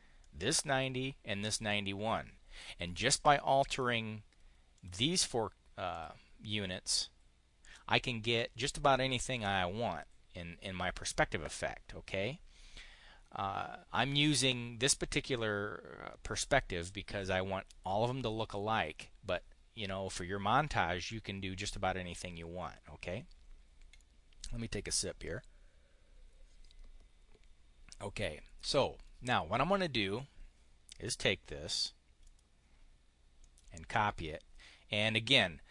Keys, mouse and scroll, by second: 0.0 click, 1.5-2.5 drag, 3.6 click, 4.6 click, 5.8 click, 30.0-31.7 drag, 32.0 click, 33.2 click.